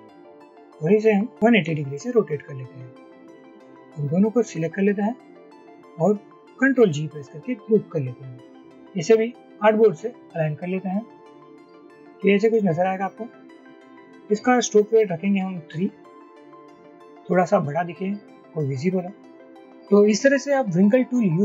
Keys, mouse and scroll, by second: 4.7 shift+click, 6.7 ctrl+g.